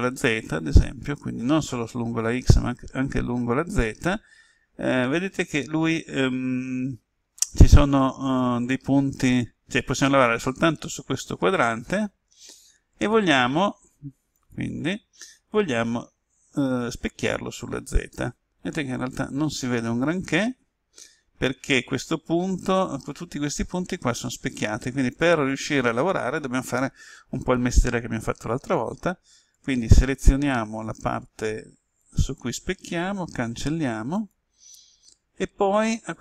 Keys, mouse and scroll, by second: 14.3-26.1 drag, 29.5-30.5 typing, 30.9-32.1 drag, 33.2 Delete, 34.1-36.2 drag.